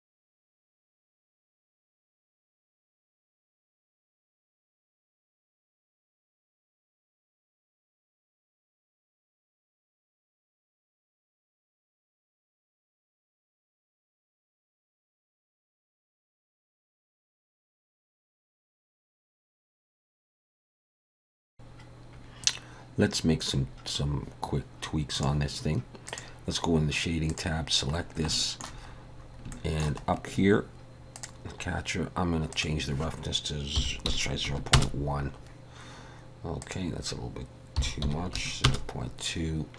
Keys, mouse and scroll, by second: 0.2 KP_3, 0.5 g, 0.7 r, 1.0 g, 1.4 click, 2.5-4.2 typing, 3.4 click, 4.7 middle click, 5.0 click, 5.5 KP_7, 5.9 shift+d, 6.0 g, 6.5 r, 7.3 click, 8.0 KP_1, 8.1-8.4 scroll up 2, 8.4 click, 9.2-12.9 typing, 10.9 click, 11.1 middle click, 12.2 scroll down 3, 13.1 scroll up 4, 13.4 scroll down 1, 13.4 shift+middle click, 13.8 ctrl+alt+KP_0, 14.1 n, 14.4 click, 14.7 click, 14.8 n, 15.1 click, 15.5 click, 15.8 click, 17.0 middle click, 17.4 shift+middle click, 17.6 scroll up 1, 17.8 scroll down 1, 17.9 shift+middle click, 18.0 click, 18.4 click, 18.6 r, 19.1 click, 19.4 middle click, 19.5 shift+middle click, 19.6 middle click, 19.7 shift+middle click, 19.9 scroll up 1, 20.0 scroll down 1, 20.2 shift+middle click, 20.9 click, 21.2 KP_0, 21.6 middle click, 21.6 middle click, 25.5 click.